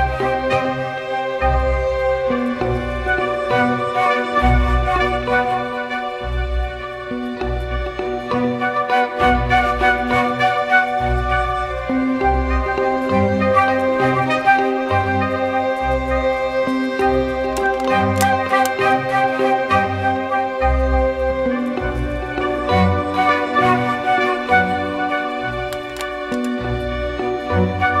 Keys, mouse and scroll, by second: 0.5-1.5 typing, 27.3 ctrl+t.